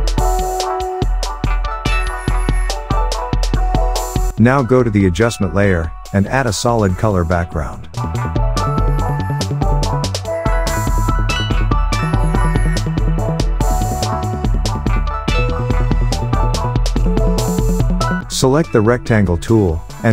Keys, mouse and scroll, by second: 0.0-2.0 typing, 2.1 Return, 3.8 click, 16.7 click, 17.8-20.1 drag.